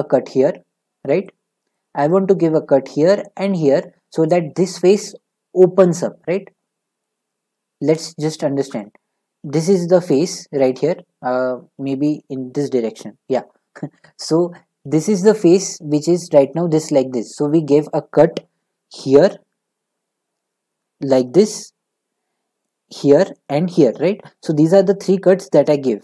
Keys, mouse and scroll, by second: 1.7-4.8 middle drag, 8.8-26.0 middle drag.